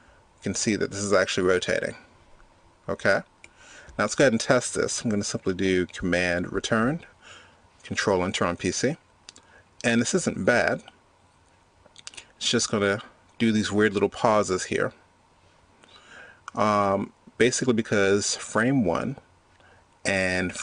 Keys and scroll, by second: 6.6 super+Return.